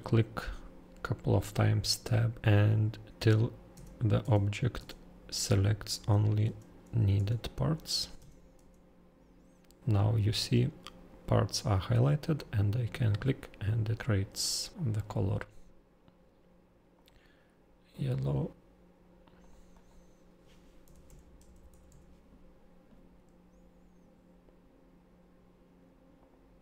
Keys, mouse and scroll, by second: 2.4 middle click, 3.2 Tab, 3.7 Tab, 4.2 Tab, 4.7 Tab, 5.3 Tab, 5.9 Tab, 6.4 Tab, 7.1 Tab, 7.7 Tab, 8.2 Tab, 8.5 Tab, 12.3 click, 13.0-14.4 scroll down 2, 14.7 click, 16.9 click, 18.1 click, 19.2 click, 19.4 click, 19.7 click, 20.6-22.3 typing, 26.2 click.